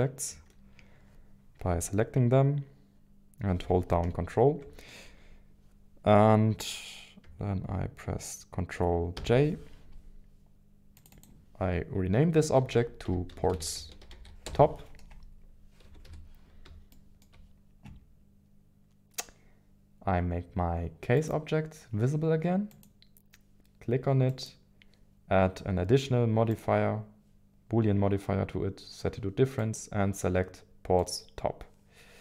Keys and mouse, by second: 9.1 ctrl+j, 11.0 click, 15.8 KP_1, 16.0 KP_7, 16.9 shift+middle click, 21.1 click, 22.7 click, 29.7 click.